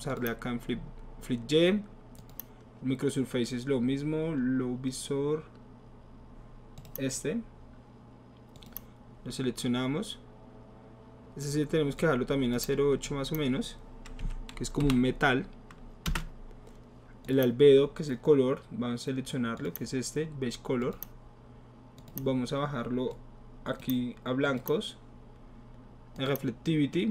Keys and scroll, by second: 14.2 KP_8, 14.8 Delete, 16.0 Return.